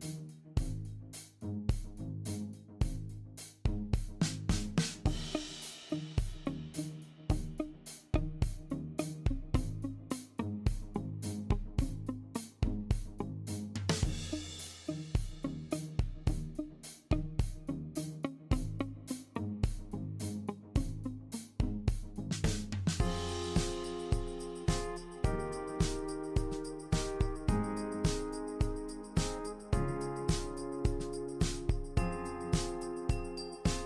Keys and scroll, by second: 8.2-9.8 typing, 18.4 typing, 32.4-33.2 typing.